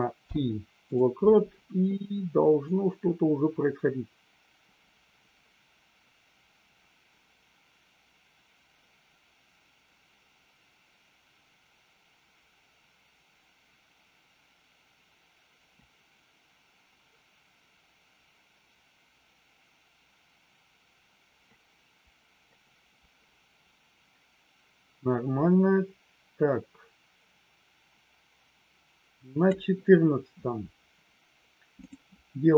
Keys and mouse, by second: 0.1 i, 2.7-29.6 drag, 31.7 click.